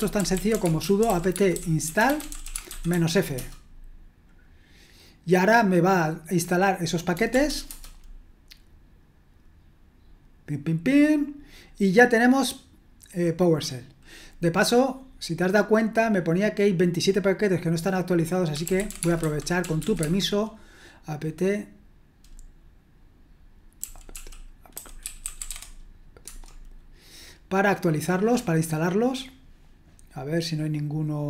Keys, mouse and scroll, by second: 0.0-3.4 typing, 7.7 typing, 18.5-20.5 typing, 24.5-26.0 typing, 26.2 Return.